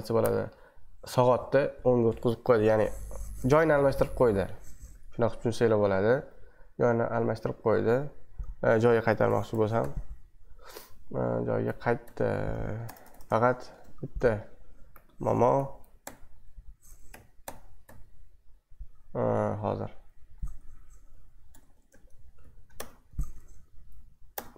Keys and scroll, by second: 4.9 super+2, 8.0 super+1, 9.3 ctrl+b, 9.8 shift+], 12.0 c, 13.1-13.7 typing, 15.5 ctrl+b, 16.0 Left, 17.1 ctrl+b, 17.4 Left, 17.8 c, 20.8-24.5 typing.